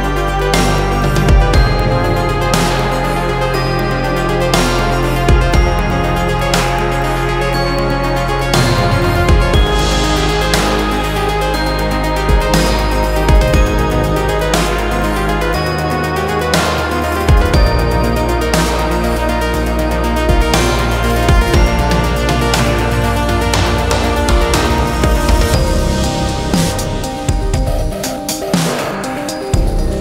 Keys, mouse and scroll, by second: 0.0 right click, 0.6-2.0 drag, 2.0 s, 6.2 middle click, 6.7-7.2 scroll down 1, 7.2 g, 15.5-16.7 middle drag, 16.7 scroll up 1, 16.9-19.5 middle drag, 19.6 g, 24.8 click, 25.1 middle click, 25.9 ctrl+z, 26.3-27.8 middle drag, 27.8 i.